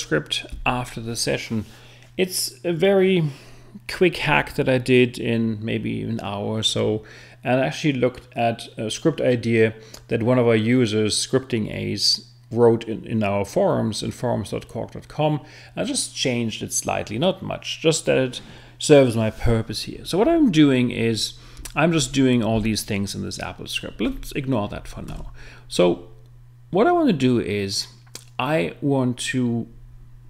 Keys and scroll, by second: 25.1 super+Tab.